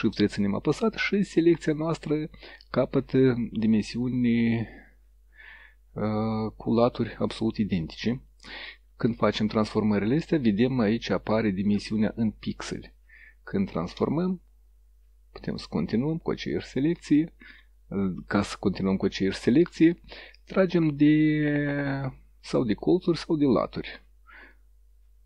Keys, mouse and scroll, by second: 13.7-17.8 shift+drag, 18.5-21.4 drag, 22.9-24.0 drag, 24.5-25.2 drag.